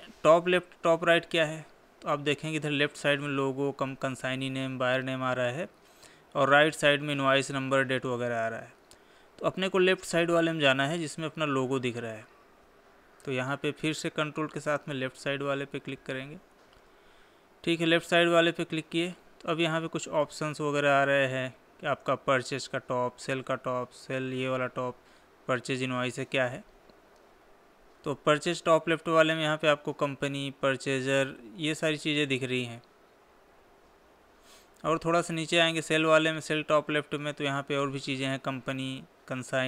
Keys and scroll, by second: 32.9 Down.